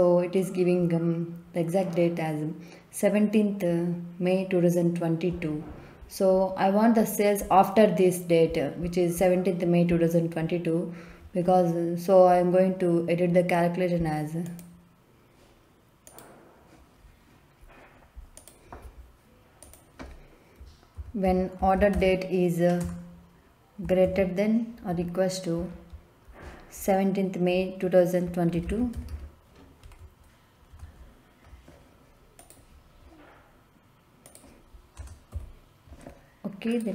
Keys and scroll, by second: 20.9-21.9 typing, 22.8 Return, 24.0 shift+., 24.8 =, 28.5 d, 28.6 a, 28.9 t, 29.0 e, 29.8 Down, 30.7 Return, 34.9 BackSpace, 35.3 0.